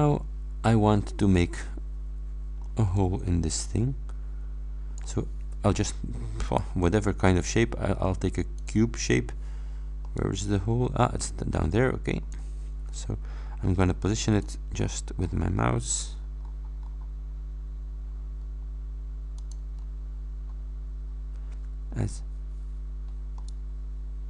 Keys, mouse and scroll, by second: 1.6-2.8 middle drag, 3.0 click, 3.1-5.2 middle drag, 3.1-3.7 scroll up 1, 3.7-5.2 scroll up 1, 6.5 click, 8.6 click, 10.1 click, 10.2 middle click, 10.2 scroll up 1, 10.3-12.6 drag, 10.3-12.6 right drag, 14.4 click, 14.8-15.2 scroll up 2, 16.4-16.8 scroll up 2, 17.4-18.1 scroll up 3, 19.4 middle click, 19.9-20.4 scroll down 2, 21.1 scroll down 2, 23.5-24.2 middle drag.